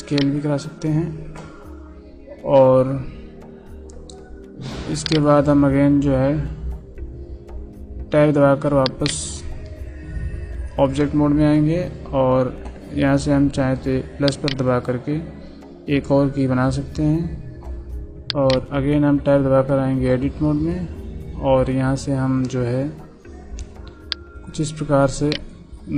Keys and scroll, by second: 8.0 Tab, 9.6 Tab, 18.9 Tab.